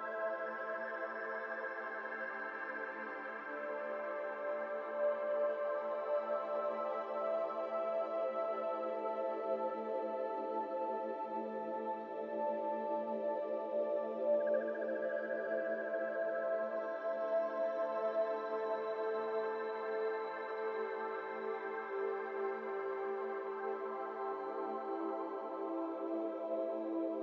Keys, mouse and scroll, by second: 0.0 alt+shift+click, 0.9 ctrl+b, 2.1 alt+z, 2.5 alt+shift+click, 2.9 alt+z, 3.6 ctrl+b, 6.6 alt+shift+click, 7.1 ctrl+b, 12.1 Tab, 12.2 scroll down 2, 12.3-12.7 middle drag, 12.7 click, 12.9 scroll down 2, 13.0-14.1 middle drag, 14.1 click, 14.3 middle drag, 14.5 Tab, 14.7 shift+middle click, 15.1 3, 15.2 click, 15.4 middle click, 15.6-16.2 scroll up 1, 16.2 click, 16.4-16.9 scroll up 4, 16.9 shift+s, 17.2-18.0 shift+scroll down 4, 17.3 shift+middle click, 18.0-19.2 middle drag, 19.2-19.5 scroll up 1, 19.5 i, 20.8 e, 21.9 middle click, 22.1-22.7 scroll up 1, 22.7 i, 23.5 scroll down 3, 23.8 middle click, 24.1 alt+z, 24.2-24.7 scroll down 1, 24.7 middle click, 25.3 KP_1, 25.9 alt+z, 26.2 shift+middle click, 26.3 scroll up 5, 26.6 ctrl+z.